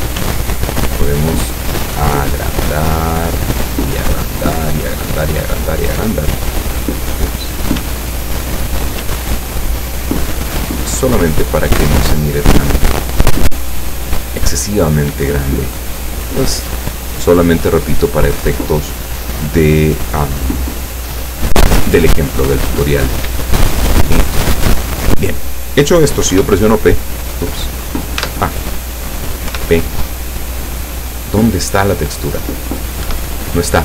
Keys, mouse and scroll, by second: 0.3 s, 5.9 click, 7.4 click, 7.8 s, 8.7 click, 9.1 s, 13.4 click, 21.8-22.2 scroll up 2, 22.5 scroll down 2, 24.6 shift+click, 26.4 p, 28.2 Tab, 29.5 p, 33.1 Escape.